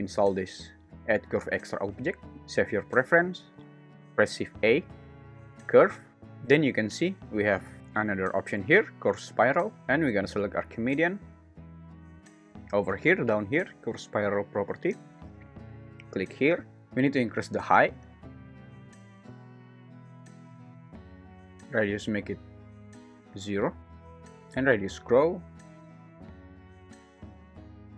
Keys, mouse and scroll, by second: 3.9 shift+Escape, 4.4 shift+a, 16.0 click, 18.7-20.3 drag, 21.3-23.5 drag, 23.7 0, 23.8 Return, 24.6-26.4 drag, 27.6 click.